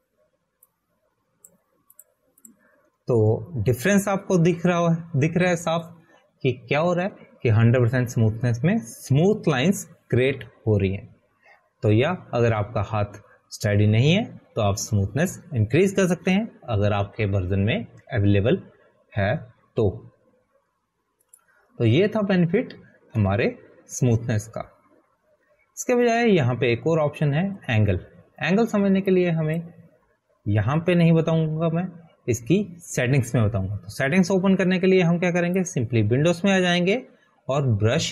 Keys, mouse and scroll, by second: 31.6 click, 33.9 click.